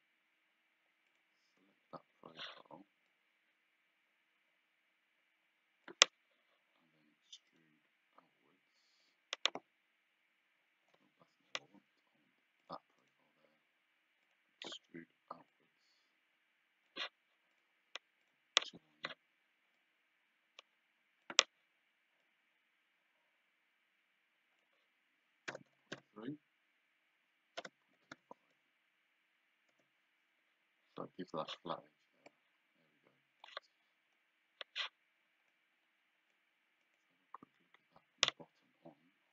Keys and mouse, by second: 1.1 click, 3.1 click, 7.6 right click, 9.1 click, 11.4 Escape, 12.7 click, 13.1 right click, 14.3 click, 15.6 click, 17.6 click, 19.8 click, 22.3 click, 25.6 KP_0, 26.0 KP_3, 27.7 BackSpace, 28.0 KP_2, 29.8 Return, 29.8 KP_Enter, 32.4 click, 35.6 click, 36.9 click.